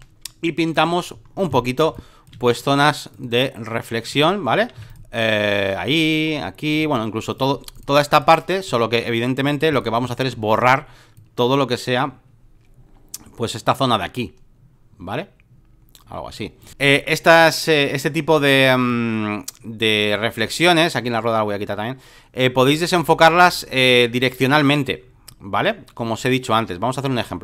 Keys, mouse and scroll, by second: 0.7 click, 1.8 space, 1.9 click, 2.2 right click, 2.5 right click, 3.1-4.8 drag, 4.8 x, 4.9-8.7 drag, 8.7 right click, 9.4 click, 10.0 x, 11.2-16.7 drag, 16.7 Escape, 18.9-27.4 drag.